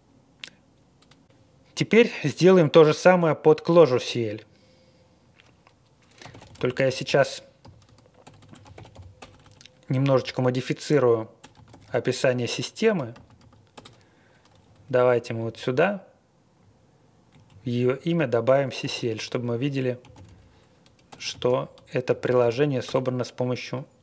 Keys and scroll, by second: 6.0-10.1 typing, 11.3-13.8 typing, 13.8 Return, 14.5 Up, 14.8 Up, 14.9 Up, 15.0 Up, 15.2 Up, 15.3 Up, 15.5 Up, 16.5 Right, 17.0 Right, 17.4 Down, 17.7 Right, 17.9 Right, 18.1 Right, 18.8-23.0 typing.